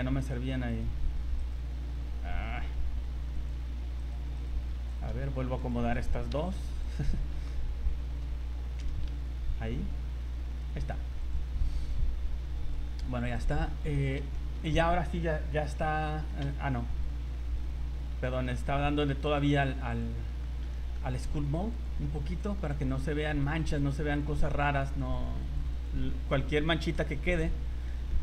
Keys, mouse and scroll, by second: 0.2 click, 0.7 right click, 3.3 click, 4.0 right click, 4.7 c, 5.7 click, 6.3 c, 7.3 f, 8.0 f, 8.6 Escape, 9.0 g, 11.6 scroll down 1, 12.7 click, 13.0-13.6 scroll down 4, 13.6 middle click, 14.0 Tab, 14.3 shift+middle click, 14.6 middle click, 16.1-16.4 scroll up 3, 16.4 shift+middle click, 17.4 middle click, 17.7-18.2 scroll up 3, 18.9 click, 19.3 click, 19.5 click, 19.9 click, 20.4 shift+middle click, 20.7 middle click, 21.4 click, 21.7 click, 22.2 middle click, 22.9 click, 23.2 click, 23.6 click, 23.8 click, 24.1 click, 24.5 click, 25.0 click, 25.4 click, 25.7 click, 26.1 shift+middle click, 26.6 middle click, 27.1 click, 27.4 click, 27.9 shift+middle click.